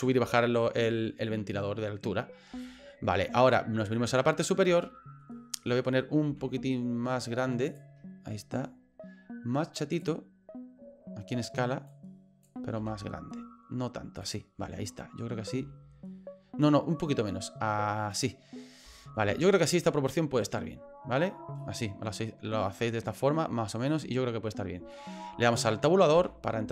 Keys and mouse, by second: 2.6 shift+middle click, 3.9 middle click, 4.8 shift+middle click, 6.3 s, 11.9 click, 12.8 s, 15.6 s, 19.0 shift+middle click, 19.7 middle click, 21.6-23.3 middle drag, 24.9 shift+middle click, 26.2 Tab.